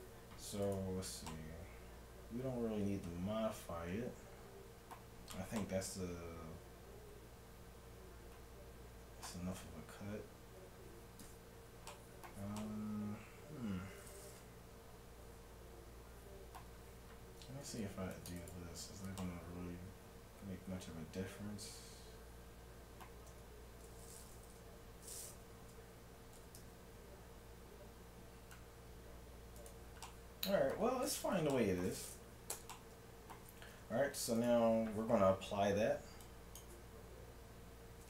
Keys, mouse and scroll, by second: 0.7-2.3 right drag, 1.3-3.3 middle drag, 5.6-7.4 middle drag, 9.6 Tab, 12.7-14.4 middle drag, 17.6 ctrl+r, 18.8 Tab, 19.2-20.8 middle drag, 23.3 Tab, 25.5 Tab, 26.4 s, 30.0 middle click, 32.6 Tab, 33.8 Tab, 34.4-36.3 right drag, 36.3-38.0 drag.